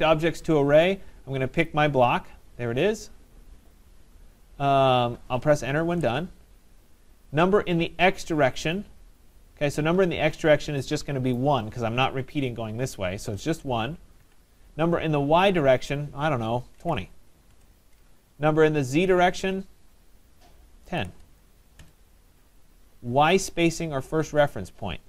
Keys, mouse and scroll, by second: 0.5-1.3 scroll, 1.7 click, 2.1-3.2 scroll, 3.2 scroll, 5.1 middle click, 5.9 Return, 14.8 Return, 16.9-17.6 typing, 20.8-21.8 typing, 22.7 Return, 24.2-25.0 scroll.